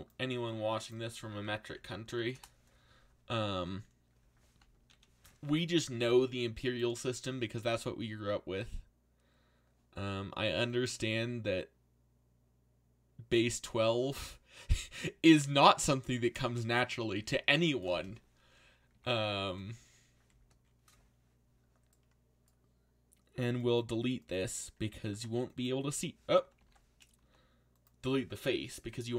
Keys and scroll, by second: 0.2 g, 1.5-2.6 typing, 4.9 ctrl+l, 17.1 z, 25.1 x, 26.6 ctrl+z, 27.2 x.